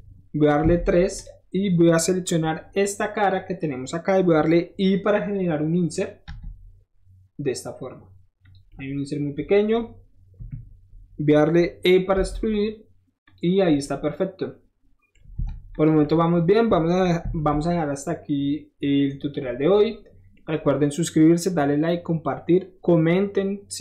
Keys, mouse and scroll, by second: 0.6 3, 1.1 click, 2.3 middle click, 2.5 middle click, 8.4 click, 8.7 middle click, 10.5 KP_1, 12.1 e, 13.2 click, 13.6 middle click, 15.5 Tab, 15.5 middle click, 15.7 drag, 17.2 ctrl+s, 19.2 middle click, 19.5 middle click.